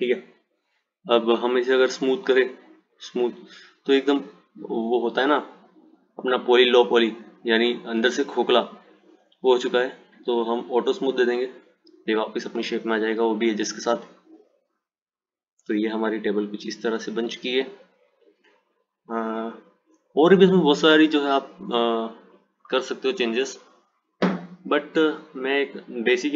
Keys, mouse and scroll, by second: 1.6 click, 2.3-5.3 right drag, 6.6 click, 8.9 click, 9.6-10.4 scroll down 1, 11.0 click, 12.4 click, 14.4 click.